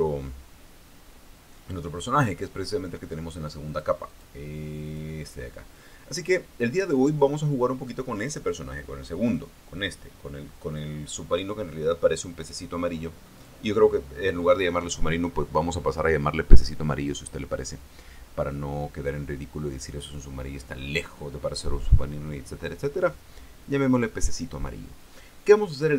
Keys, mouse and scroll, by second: 4.4 click, 4.8 click, 5.5 click, 7.6 click, 9.9 click, 14.1 click.